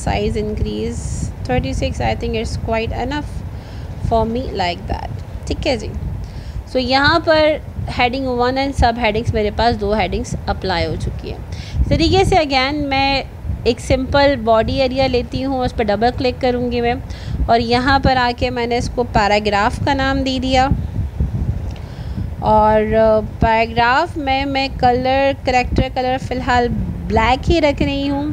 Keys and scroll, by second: 18.1 ctrl+a.